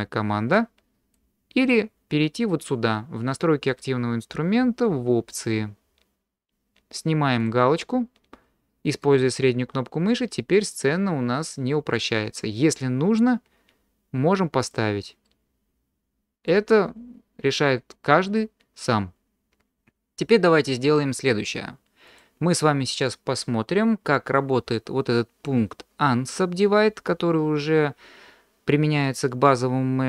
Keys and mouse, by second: 0.5 click, 7.4 click, 9.0-10.5 middle drag, 14.6 click, 15.2 middle click, 16.0 click, 16.0 right click.